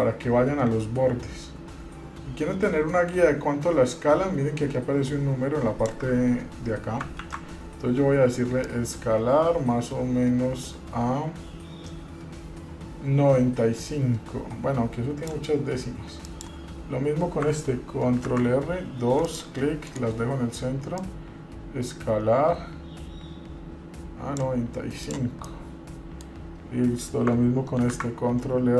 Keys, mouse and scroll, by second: 7.5 ctrl+z, 8.8-15.5 drag, 16.4 click, 18.3 ctrl+r, 21.2-24.7 drag, 25.2 click, 25.7 middle click, 28.0 ctrl+r.